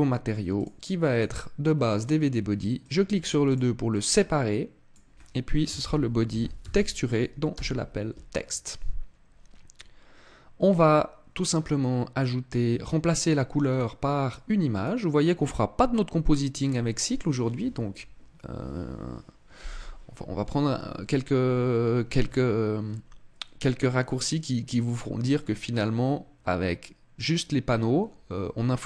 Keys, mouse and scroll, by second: 0.3 click, 2.5 click, 3.2 click, 13.4 click.